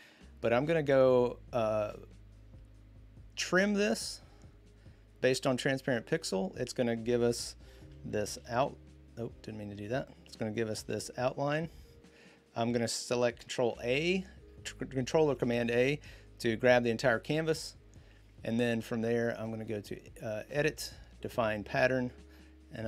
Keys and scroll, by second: 8.2 ctrl+0, 10.5 ctrl+0, 13.4 ctrl+a.